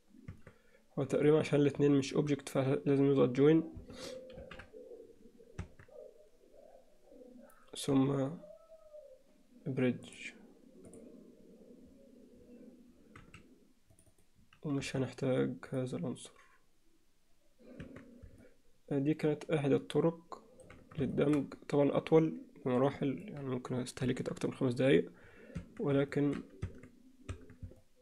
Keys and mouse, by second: 0.5 Tab, 1.2 click, 6.0 ctrl+j, 6.2 Tab, 8.0 z, 10.2-12.6 drag, 13.2 z, 14.0 click, 14.8 x, 18.0 Tab, 18.4-20.7 alt+middle drag, 21.2 shift+middle click, 21.6-23.2 middle drag, 24.0 KP_1, 25.8 Tab, 26.2 alt+shift+middle click, 26.8 Tab, 27.5 Tab, 27.8-28.0 alt+middle drag.